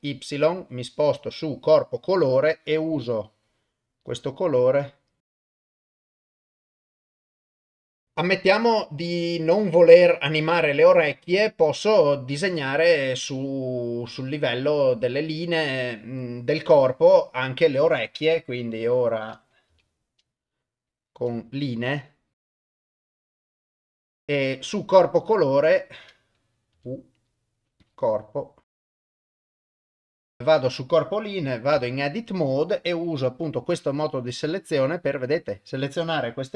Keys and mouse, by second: 2.5-4.0 drag, 4.6 click, 5.5 ctrl+z, 5.5 click, 5.8 click, 6.0 click, 6.5 click, 6.8 click, 7.2 click, 7.5 click, 12.9 click, 15.5 click, 17.1 click, 19.7 u, 22.1 click, 22.8 ctrl+shift+z, 22.8 shift+click, 23.3 shift+click, 24.4 click, 26.8 u, 28.7 shift+click, 29.5 shift+click, 31.7 Tab, 34.3 click.